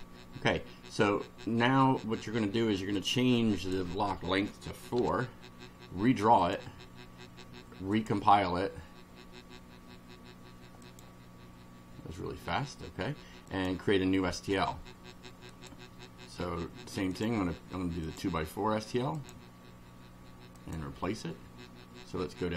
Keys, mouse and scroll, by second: 3.0-3.9 drag, 5.0 4, 6.4 click, 8.0 click, 10.9 click, 13.5 click, 15.5 click, 17.1 click, 18.1 click, 19.2 click, 20.6 click.